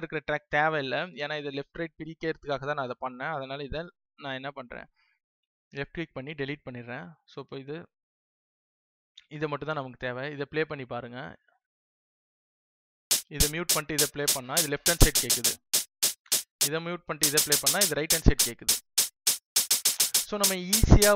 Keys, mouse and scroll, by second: 5.3 right click, 7.1 click.